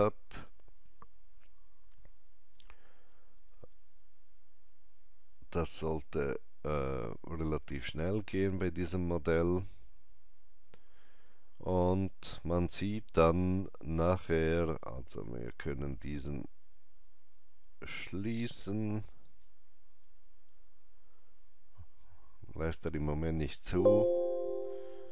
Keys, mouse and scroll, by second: 19.3-25.1 drag.